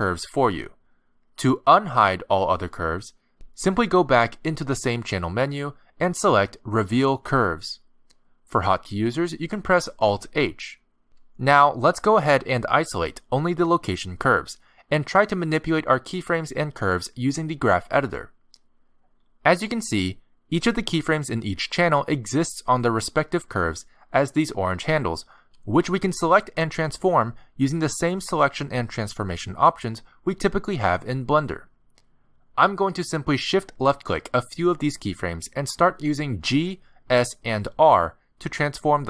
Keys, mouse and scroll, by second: 0.6 shift+h, 1.8 click, 3.0 shift+h, 5.2 click, 9.9 ctrl+z, 11.3 alt+h, 15.6 click, 16.2 shift+click, 16.6 shift+click, 17.5 shift+h, 19.6 click, 20.3 g, 23.2 click, 23.5 g, 26.6 click, 26.9 g, 29.5 shift+click, 29.9 g, 32.8 click, 33.8 shift+click, 35.0 click, 35.7 click, 37.7 g.